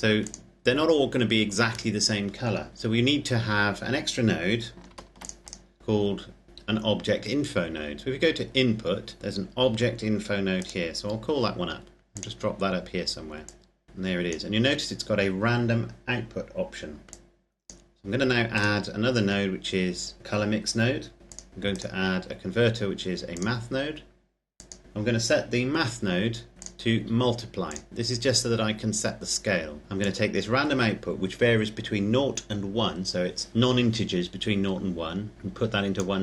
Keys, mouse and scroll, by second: 0.0 click, 0.4-2.6 scroll up 1, 3.0-3.5 scroll down 1, 4.6 ctrl+s, 4.9 ctrl+click, 10.6 click, 17.0 click, 21.2 click, 26.5 click, 29.8 click.